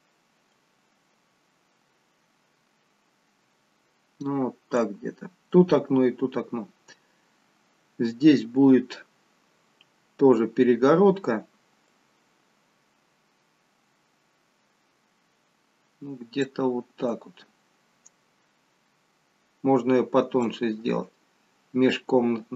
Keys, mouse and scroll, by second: 0.5 click, 11.8 click, 17.0 click.